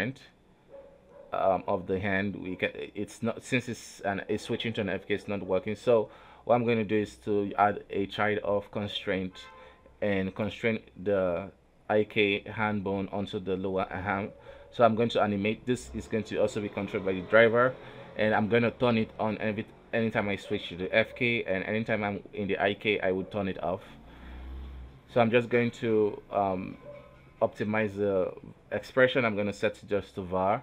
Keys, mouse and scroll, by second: 0.8-1.9 drag, 1.9 middle click, 2.5 right click, 2.7 r, 6.1 shift+right click, 6.8 ctrl+shift+c, 8.7 click, 9.8-10.8 drag, 10.8 right click, 10.9 r, 12.6 right click, 12.9 r, 14.1 r, 15.3 right click, 15.4 r, 16.6 right click, 17.6-20.6 right drag, 21.4-24.4 right drag.